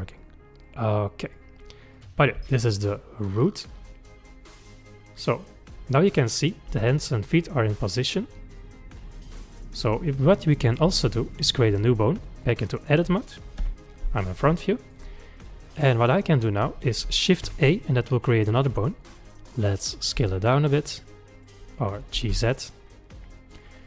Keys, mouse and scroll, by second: 0.2-1.9 middle drag, 1.9 click, 2.4 g, 5.9 middle click, 6.3-6.7 scroll down 1, 6.7 g, 11.6-13.6 drag, 13.6 KP_1, 14.6 shift+middle click, 15.4 click, 17.4 shift+a, 18.5 click, 19.7 click, 20.1 s, 21.9 click, 22.1 g.